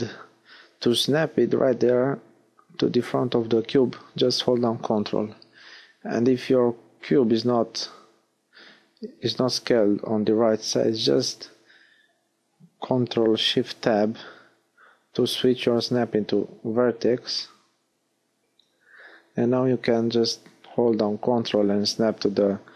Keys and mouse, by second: 0.4-2.2 middle drag, 0.4 g, 15.1 ctrl+shift+Tab, 19.0 g, 21.5-22.7 drag.